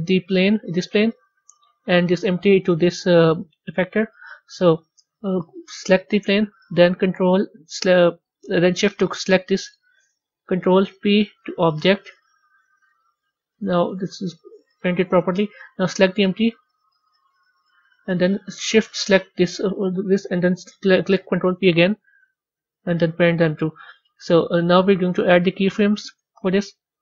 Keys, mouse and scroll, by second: 1.0 click, 4.2-7.3 middle drag, 7.3 ctrl+click, 8.6 shift+click, 10.4 ctrl+p, 11.9 click, 12.5 g, 14.5-15.9 middle drag, 15.9 click, 16.9 click, 18.8 shift+click, 21.1 ctrl+p, 22.8 a, 25.8-27.0 drag.